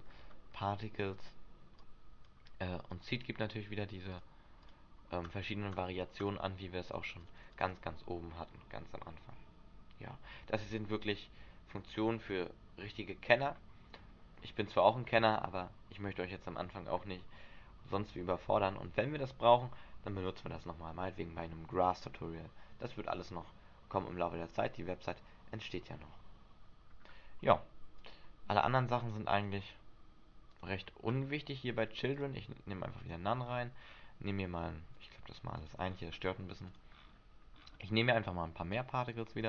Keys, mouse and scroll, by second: 0.2 scroll down 5, 0.7 middle click, 1.9 click, 3.0 click, 4.8 click, 5.4 click, 6.4 click, 7.0 click, 7.4 click, 7.5 click, 7.7 click, 26.8-27.1 scroll down 2, 28.1 click, 28.1-28.7 scroll down 1, 28.7 click, 29.2 click, 29.8 click, 30.7 click, 31.3-32.2 scroll up 3, 32.3 click, 33.2 click, 33.7-34.6 scroll up 5, 35.1 click, 35.7 click, 36.0-36.8 scroll up 4, 36.8 click, 37.1-38.4 scroll up 11, 38.8 click.